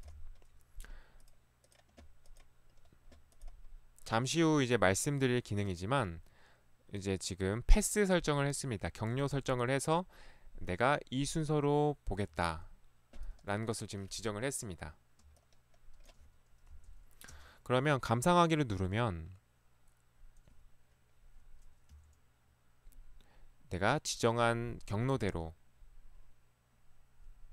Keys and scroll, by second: 0.2 p, 12.3 Escape, 16.8 Delete, 17.4 space, 21.9 Right, 25.2 Right.